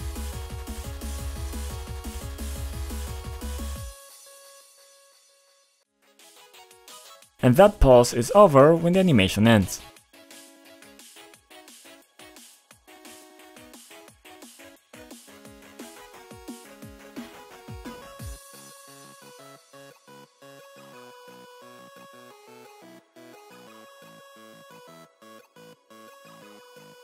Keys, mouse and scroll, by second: 0.8 click, 2.5-5.9 typing, 6.3 click, 7.3 click, 7.5 click, 7.6 double click, 9.7 click, 12.8 click, 19.9 scroll up 2, 20.5 scroll up 1, 21.1-21.6 scroll up 1, 21.6 scroll down 2, 22.5 scroll up 2, 23.9 click, 24.6 typing, 24.8 scroll down 2, 25.5-26.0 scroll down 2, 26.7 click, 26.7 click.